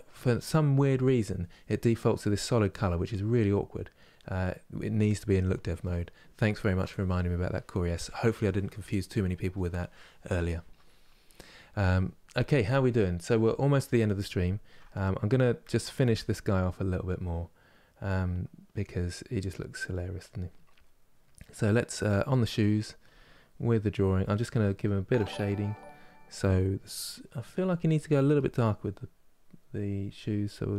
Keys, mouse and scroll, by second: 0.6-3.9 middle drag, 3.9-13.0 drag, 13.0-22.7 middle drag, 22.7 click, 23.2-28.0 middle drag, 28.0-30.7 drag.